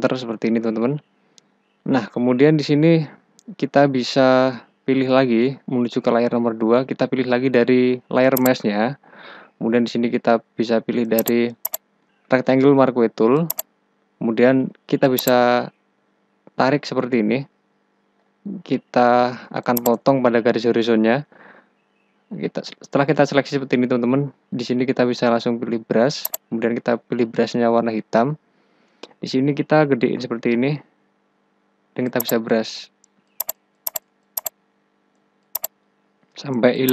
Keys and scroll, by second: 19.1 space, 29.4 ], 32.4 ].